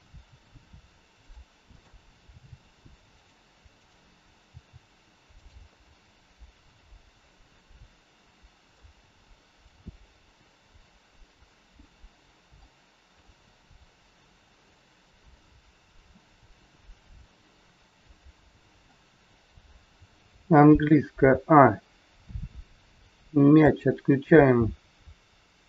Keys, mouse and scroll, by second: 2.2 click, 2.2 g, 3.7 click, 4.4 g, 5.8 scroll down 3, 6.7 scroll up 2, 8.8 middle click, 13.2 middle click, 14.7 middle click, 20.8 a, 23.1 a, 23.5 click, 23.7 a.